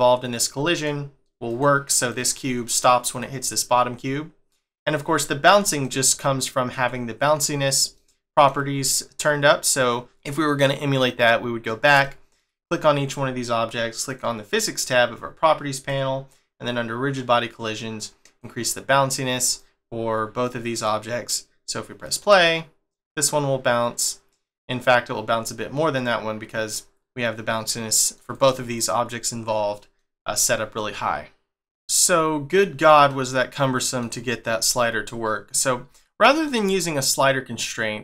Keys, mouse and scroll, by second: 0.6 middle click, 1.5 click, 2.0 click, 3.1 click, 4.7 click, 5.8 middle click, 11.0 click, 12.0 shift+middle click, 14.0 click, 15.7 click, 17.9 click, 19.4 click, 20.4 click, 22.0 click, 27.9 middle click, 28.3 click, 28.7 click, 29.7 middle click, 33.1 middle click, 34.7 middle click, 36.0 shift+middle click.